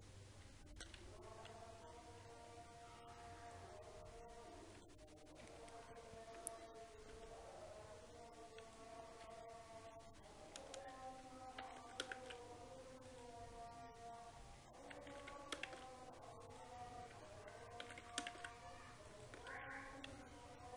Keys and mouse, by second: 4.0 s, 6.2 KP_7, 7.7 s, 10.5 Tab, 11.2 a, 12.3 e, 15.7 e, 18.5 e, 20.2 alt+m.